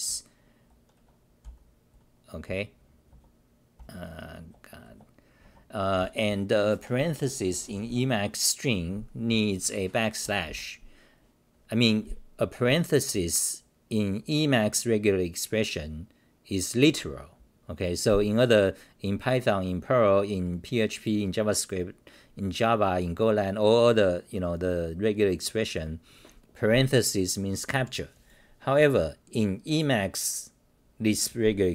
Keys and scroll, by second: 3.8 BackSpace, 5.4 Home, 10.0-10.9 typing.